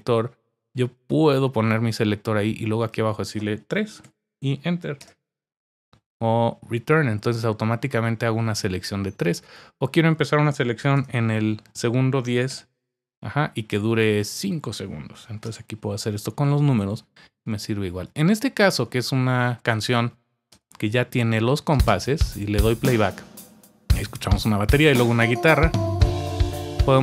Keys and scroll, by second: 4.0 typing, 5.0 Return, 10.5-11.4 typing, 12.5 Return, 15.1 5, 15.4 Return, 20.5 Return, 21.7 space.